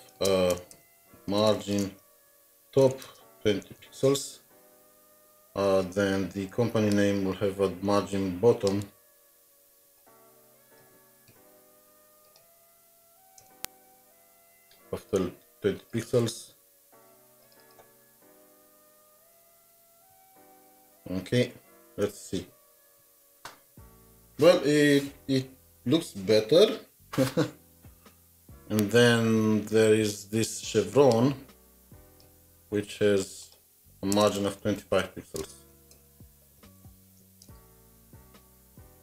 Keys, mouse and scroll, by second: 0.0-4.5 typing, 0.7 Return, 8.9 ctrl+c, 9.3 typing, 11.3 alt+shift+Down, 11.5 typing, 13.1 Down, 13.4 Return, 15.9 Return, 16.1 typing, 17.6 double click, 18.2-20.7 typing, 20.8 alt+Tab, 21.9 alt+Tab, 32.2 alt+t, 32.4 ctrl+c, 32.4 typing, 32.7 ctrl+c, 32.7-33.1 scroll down 2, 34.1 Return, 34.3 Return, 34.6 typing, 35.6-39.0 typing.